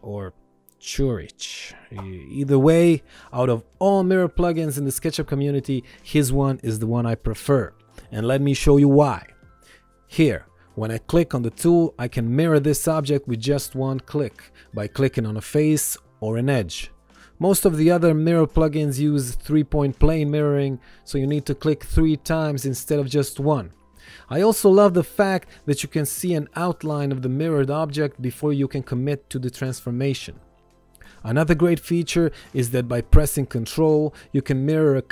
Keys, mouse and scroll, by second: 8.8 ctrl+click, 9.6 ctrl+z, 10.1 ctrl+1, 10.5 click, 22.3 ctrl+z, 24.0 click.